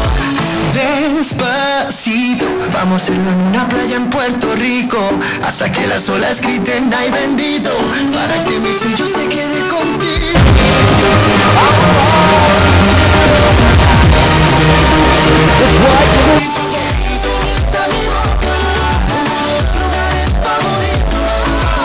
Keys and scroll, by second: 16.4 Page_Down.